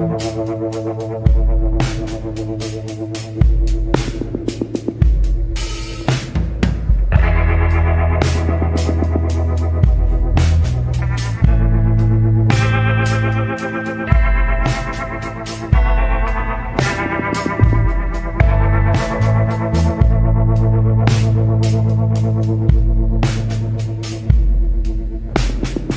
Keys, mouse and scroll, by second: 0.2 scroll up 1, 4.7 scroll down 1, 5.2 scroll up 1, 9.2 scroll down 1, 14.2 scroll down 1, 19.6 scroll up 1, 21.7 scroll down 1, 24.3 scroll up 1.